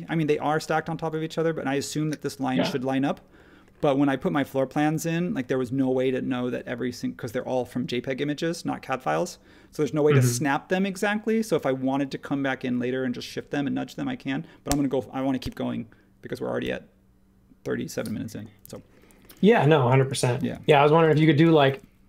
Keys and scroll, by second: 18.6 space, 19.3 space.